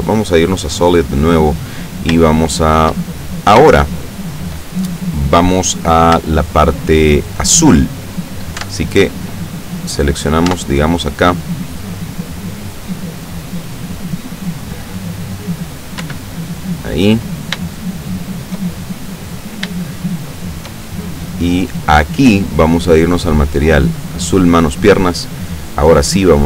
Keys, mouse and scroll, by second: 0.1 click, 0.9 click, 2.4 shift+middle click, 3.1-3.8 scroll up 1, 3.9 shift+click, 5.3-6.3 scroll down 3, 6.5-7.5 shift+middle drag, 8.7 Tab, 9.7 right click, 10.2 right click, 10.6 Tab, 16.1 l, 17.8 shift+middle click, 19.9-20.9 shift+middle drag, 23.0 click, 24.1 click, 26.3 click.